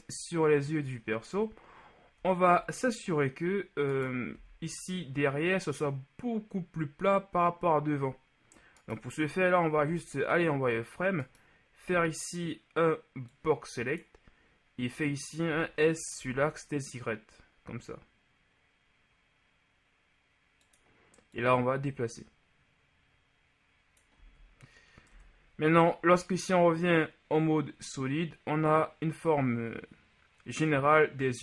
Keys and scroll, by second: 4.4 b, 9.9 z, 11.9 b, 15.6 s, 16.3 y, 24.3 z, 25.1 Tab.